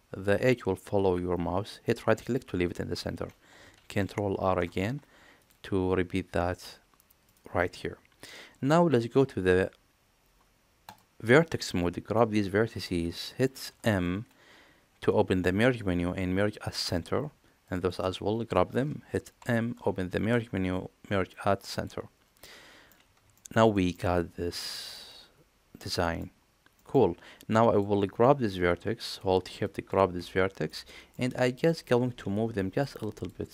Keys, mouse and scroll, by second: 4.4 ctrl+r, 10.9 click, 11.9 click, 13.7 m, 17.6 click, 19.4 m, 22.5 middle click, 23.4 shift+middle click, 23.8 middle click, 24.6 shift+middle click, 24.9-26.2 middle drag, 26.8 middle click, 27.5 click, 29.7 shift+click, 30.7 middle click, 31.7 middle click.